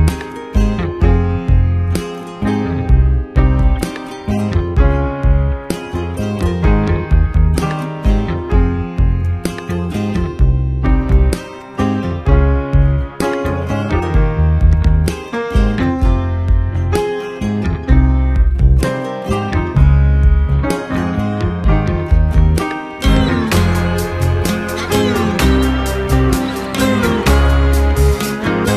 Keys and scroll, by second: 2.1 s, 2.4 ctrl+space, 3.2 space, 4.9 ctrl+space, 10.3 space, 11.4 space, 21.9 Return, 24.2 space, 24.6 ctrl+KP_Subtract, 25.1 ctrl+y, 25.6 ctrl+space, 26.3 Return.